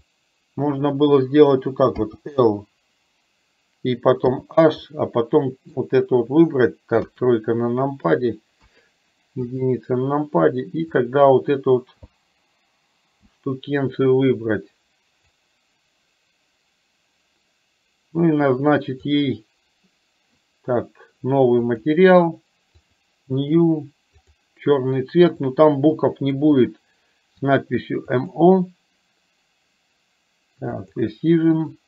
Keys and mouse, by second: 4.9 middle click, 7.1 KP_3, 8.6 KP_1, 9.5 click, 11.0-15.4 drag, 19.1 click, 21.8 click, 23.0 drag, 24.3 click, 28.4 click, 30.9 click.